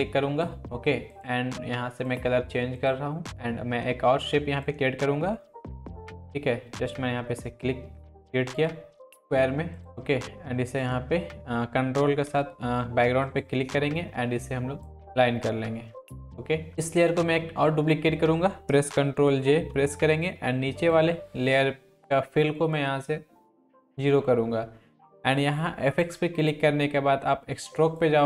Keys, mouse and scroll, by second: 14.8 click, 19.5 ctrl+j, 20.8-24.0 drag, 26.0 click.